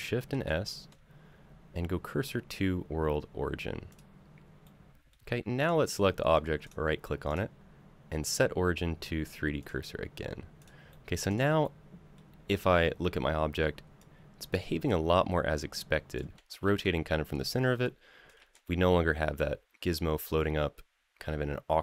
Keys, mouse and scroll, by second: 0.1 shift+s, 4.4 middle click, 5.4 click, 6.4 right click, 7.1-9.5 right drag, 10.4 click, 10.7 middle click, 11.1 click, 11.4-11.9 middle drag, 13.8-15.9 drag, 16.4 ctrl+z, 17.6-18.0 drag, 18.2 ctrl+z, 18.4-21.8 middle drag.